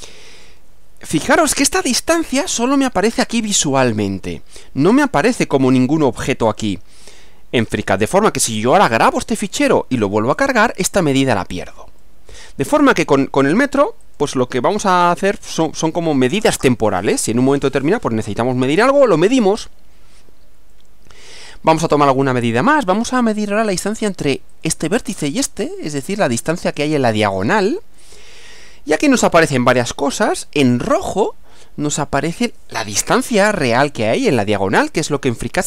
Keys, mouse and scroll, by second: 2.6-5.1 middle drag, 12.0-12.8 middle drag, 14.0 click, 20.7-22.5 middle drag, 24.5 click, 26.7 click.